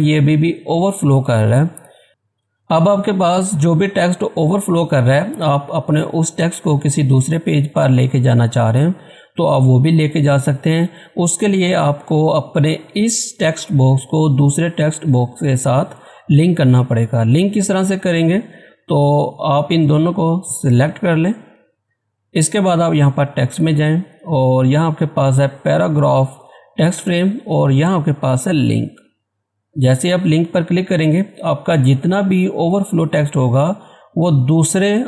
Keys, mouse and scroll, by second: 0.9 scroll up 1, 1.0 scroll down 1, 18.3 click, 20.6 shift+click, 28.9 click.